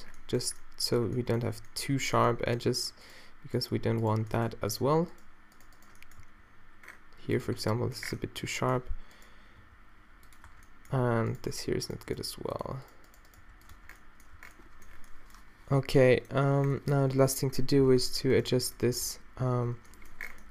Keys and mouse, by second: 1.5 Tab, 6.2 g, 7.5 Tab, 7.5-8.6 middle drag, 8.8 Tab, 9.6 g, 10.5 Tab, 11.1 Tab, 11.5 g, 12.2 g, 13.7 click, 13.7 Tab, 14.0-15.3 middle drag, 14.4 a, 18.0 Tab, 19.7 -.